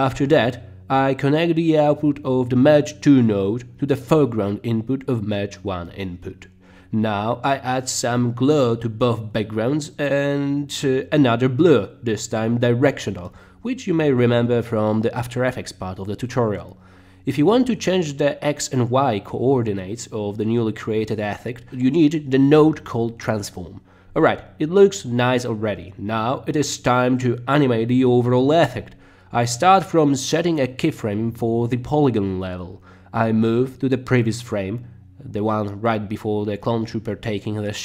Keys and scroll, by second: 8.9-9.9 typing, 13.3 d, 15.8 Return, 23.6 t, 24.6 Down, 25.2 Down, 25.9 Return, 35.6 Left, 37.4 Right.